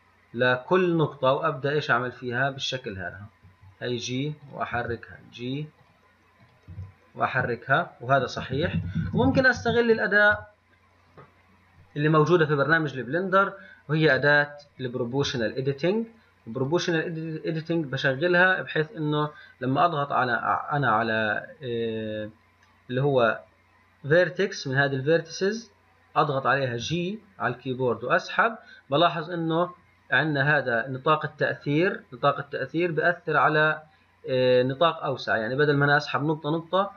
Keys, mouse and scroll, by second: 21.2-21.8 scroll down 4, 21.8 scroll up 3.